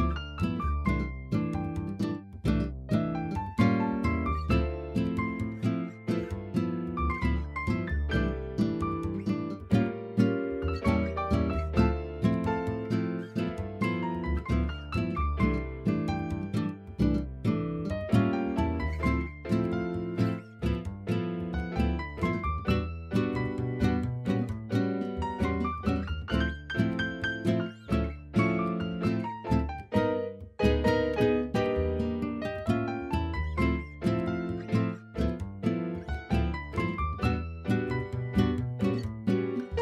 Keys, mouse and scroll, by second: 0.4-2.5 drag, 2.5 KP_1, 3.4 Tab, 3.9 shift+middle drag, 4.3 click, 5.1-5.8 drag, 5.8 s, 6.4 click, 6.8 shift+middle drag, 7.5 g, 9.0 shift+middle click, 10.8 KP_3, 13.1 r, 14.1 shift+middle click, 17.7 KP_1, 18.9 r, 21.1-22.6 middle drag, 22.6-23.2 scroll down 2, 23.2-24.7 drag, 27.2 r, 28.0 y, 31.1 r, 31.6 z, 34.0 r, 35.5 z, 36.6 click, 38.8 KP_3.